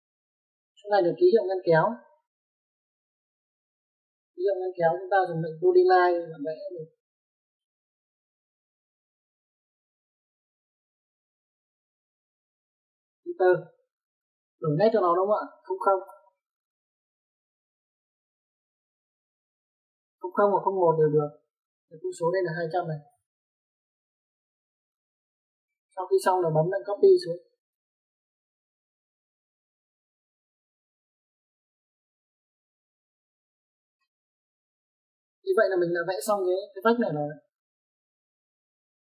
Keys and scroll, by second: 1.4 space, 2.6 Escape, 14.5 space, 17.1 KP_0, 17.3 KP_0, 18.3 Return, 23.8 2, 24.4 0, 25.2 Return, 26.2 Escape, 26.4 Escape, 27.4 typing, 28.8-29.5 typing, 33.2 space.